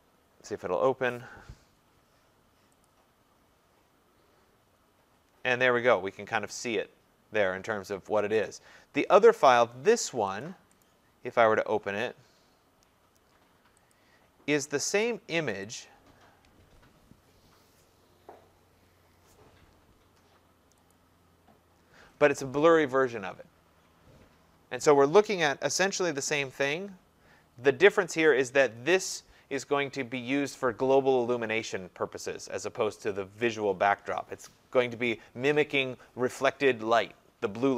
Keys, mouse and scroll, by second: 3.2-7.9 drag, 8.6 click, 10.4 click, 10.8 right click, 13.9 click, 15.0 click, 15.8 click, 20.9 click, 26.1 ctrl+0.